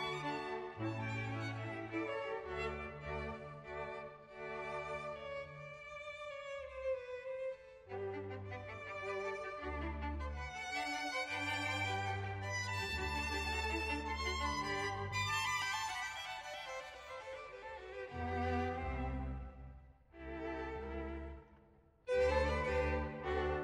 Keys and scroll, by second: 0.0 ctrl+s, 0.5 ctrl+s, 0.7 Page_Down, 0.9 ctrl+z, 1.1 ctrl+z, 1.3 Page_Up, 1.6 Page_Down, 1.8 Page_Down, 2.2 Page_Down, 2.5 Page_Down, 2.8 Page_Down, 3.1 Page_Down, 3.4 Page_Down, 3.8 Page_Down, 4.6 Page_Up, 4.7 Page_Down, 5.1 Page_Down, 5.3 Page_Down, 5.6 Page_Down, 5.9 Page_Down, 6.2 Page_Down, 6.4 Page_Down, 6.7 Page_Down, 7.1 Page_Down, 7.4 Page_Down, 7.6 Page_Down, 8.1 Page_Down, 8.5 Page_Up, 10.1 space, 11.0 Page_Down, 12.5 Page_Down, 13.7 Page_Down, 14.5 ctrl+z, 14.7 Page_Up, 15.3 Page_Down, 16.4 Page_Down, 16.6 Page_Up, 16.7 Page_Down, 17.6 Page_Down, 18.5 ctrl+z, 18.6 Page_Up, 18.7 Page_Down, 19.6 Page_Down, 20.6 Page_Down, 21.8 ctrl+s, 22.6 Page_Down.